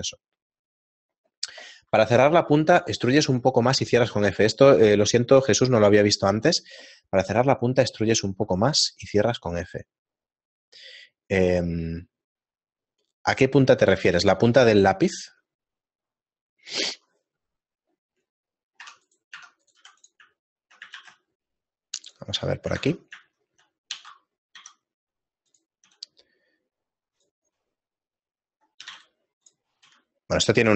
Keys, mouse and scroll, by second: 18.4 middle click, 19.2 Tab, 19.2 right click, 21.7 Tab, 21.7 right click, 21.7 shift+middle click, 21.7 x, 21.7 shift+a, 22.7 shift+middle click, 23.4 Tab, 23.4 shift+middle click, 24.2 e, 25.9 s, 29.9 middle click, 29.9-30.7 scroll up 1, 29.9 g, 29.9 s.